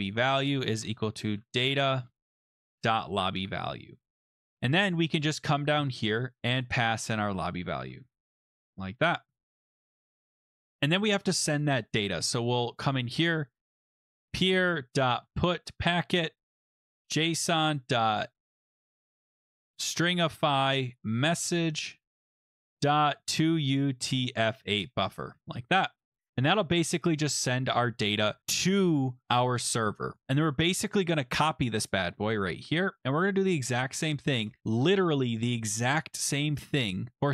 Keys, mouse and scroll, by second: 0.6-3.1 typing, 3.4 ctrl+s, 4.3-5.3 scroll, 6.0-6.5 scroll, 6.6 click, 7.1 click, 7.6-9.0 typing, 10.4 scroll down 3, 10.7 click, 10.8 click, 12.2 Return, 14.3 click, 14.3 scroll down 9, 14.3-24.4 typing, 14.4 middle click, 25.3 ctrl+s, 27.3 click, 28.4-29.1 typing, 30.2 click, 31.9 click, 32.4 ctrl+c, 33.2 click, 34.4 Return, 34.6 ctrl+v.